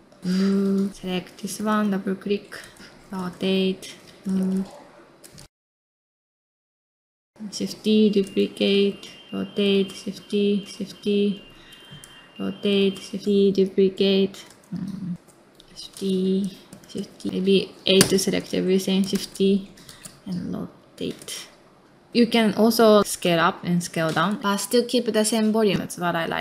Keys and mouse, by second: 0.0-1.4 typing, 0.9 click, 2.6 space, 3.1 r, 3.9 middle click, 4.3-6.9 typing, 4.7 middle click, 4.8 middle click, 5.2 middle click, 6.2 middle click, 6.5 middle click, 8.2 space, 8.7 r, 10.0 shift+d, 10.7 r, 10.9 middle click, 11.6 shift+d, 12.9-15.1 typing, 14.1 middle click, 14.5 middle click, 16.0 middle click, 16.3 space, 16.4 r, 16.7 middle click, 16.8 space, 16.9 r, 17.4 middle click, 18.0 a, 18.3 middle click, 19.1 shift+d, 19.6 r, 21.2 space, 21.6 middle click, 21.8 space, 22.6 s, 24.4 middle click, 24.9 s, 26.2 r.